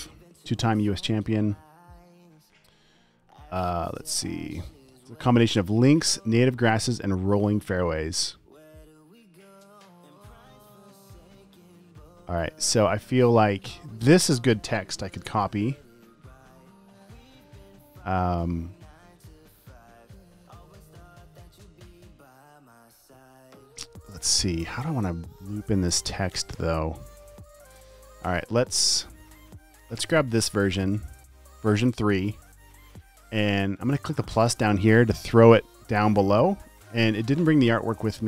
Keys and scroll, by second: 15.6 super+c, 30.4 space.